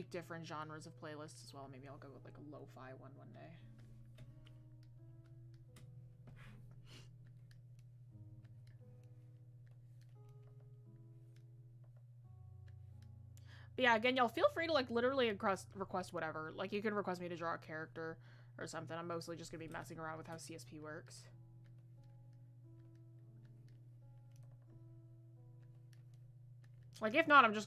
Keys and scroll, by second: 13.0 ctrl+z, 27.2 ctrl+z.